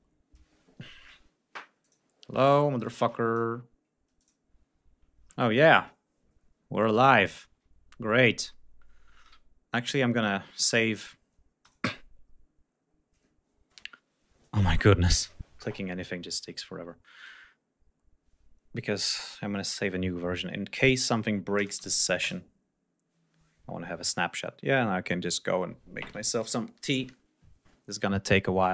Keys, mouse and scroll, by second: 2.2 click, 3.9 click, 9.9 click, 11.3-14.3 drag, 16.8 click, 20.4 click, 21.7 2, 21.9 Return.